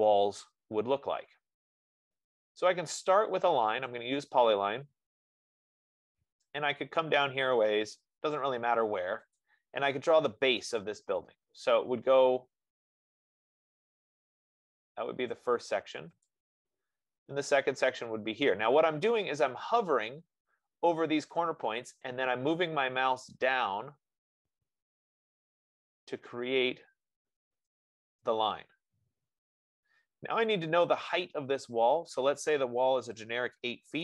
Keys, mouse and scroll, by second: 4.2 click, 5.1 F15, 10.1-14.6 drag, 16.7-21.8 drag, 28.3-33.2 drag.